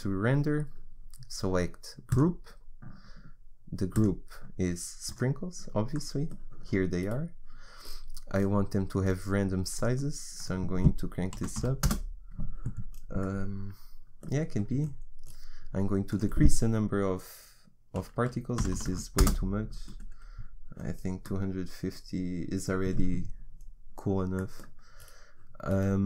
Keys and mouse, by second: 3.9 click, 6.1-9.8 middle drag, 9.8-13.0 drag, 13.6-16.1 middle drag, 16.1-19.3 drag.